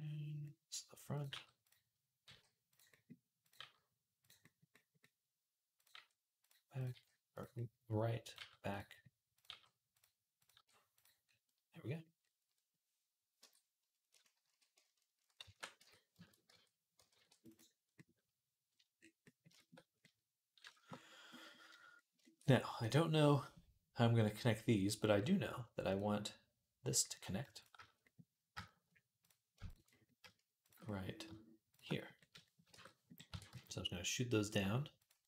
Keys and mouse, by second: 1.1 g, 2.1 g, 2.8-9.1 middle drag, 3.4 g, 5.8 g, 6.7 g, 8.2 g, 9.1 click, 9.2-10.2 middle drag, 9.3 g, 10.2 click, 10.3-15.3 middle drag, 10.4 g, 13.2 Tab, 14.3 shift+d, 15.3 ctrl+a, 15.6 Tab, 16.3 Tab, 17.0 ctrl+r, 17.5-19.7 drag, 19.7-25.7 middle drag, 25.7 click, 25.8-29.0 middle drag, 29.0 click, 29.1-31.1 middle drag, 29.4 shift+a, 32.5 shift+Tab, 33.1 e.